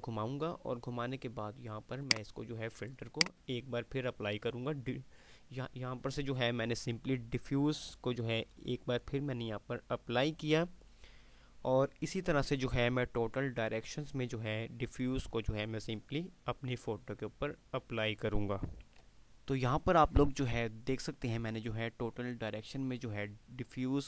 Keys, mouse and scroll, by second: 19.0 click.